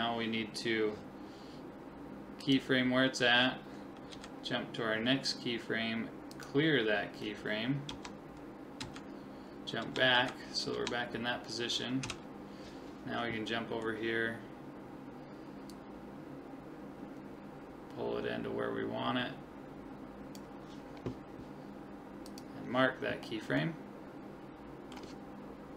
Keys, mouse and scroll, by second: 2.4 click, 4.1 Right, 6.3 click, 7.9 Left, 8.8 Right, 9.8 Left, 10.2 Right, 10.8 Left, 12.0 Right, 13.5-15.5 middle drag, 15.7 click, 22.3 click, 23.6 middle click, 24.2-25.6 middle drag.